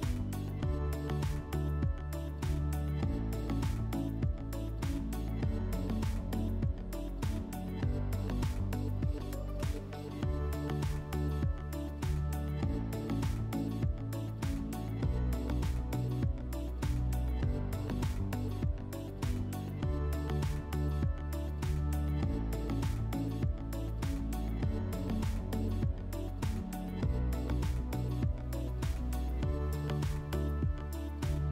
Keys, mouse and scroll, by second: 2.2-3.9 drag, 6.2 click, 7.2 F4, 8.3 r, 9.6-11.1 drag, 15.6 click, 16.6 click, 17.9 middle click, 19.7 click, 20.8 click, 21.9 click, 23.1 click, 24.8 alt+middle click, 25.6 middle click, 26.7 middle click, 28.8 q.